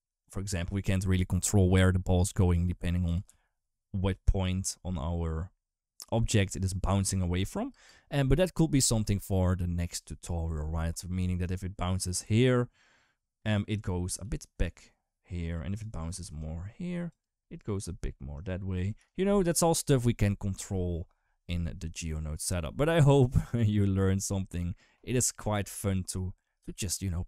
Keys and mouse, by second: 0.0 click, 2.4 space, 2.8 g, 7.5 space, 12.0 d, 12.3-13.6 drag, 13.6 d, 14.0 d, 14.2-15.6 drag, 15.6-18.8 typing, 16.2 click, 17.0 click, 18.1 click, 18.8-24.4 right drag, 26.4 space.